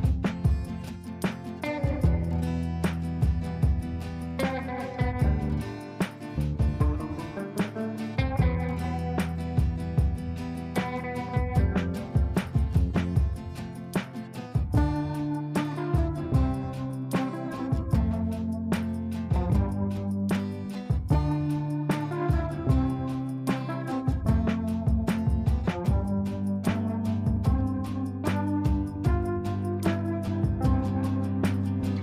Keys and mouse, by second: 1.8 shift+click, 2.7 c, 4.8-6.3 drag, 21.2 click, 25.9 click, 29.9-32.0 drag.